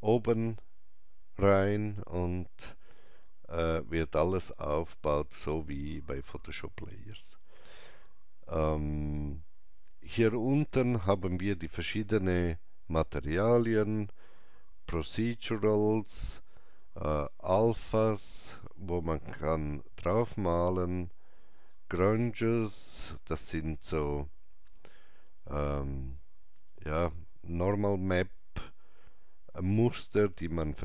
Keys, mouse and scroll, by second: 8.8-11.9 alt+drag, 15.5 scroll up 1, 17.1 click, 21.7 click, 21.7 scroll up 1.